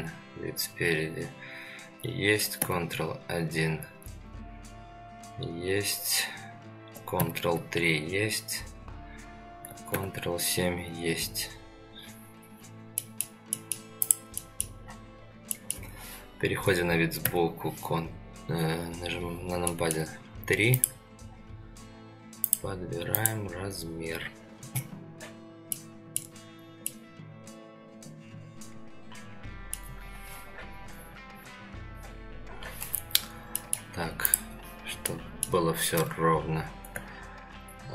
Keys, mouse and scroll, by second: 2.6 ctrl+KP_1, 7.2 ctrl+KP_3, 10.0 ctrl+KP_7, 12.5-13.0 scroll down 3, 13.0 middle drag, 13.5 middle drag, 14.0 click, 14.4 middle drag, 14.8-15.1 scroll up 2, 15.5 middle drag, 17.2 KP_3, 19.0-19.6 scroll up 3, 19.6 shift+middle drag, 20.7 click, 21.2 scroll up 2, 22.4 click, 23.1 click, 25.1-25.8 scroll down 2, 25.8-26.2 middle drag, 25.8 scroll down 1, 26.5 scroll down 1, 26.9-29.7 middle drag, 33.6 middle click, 34.3 click, 35.1 middle click, 36.3 Tab.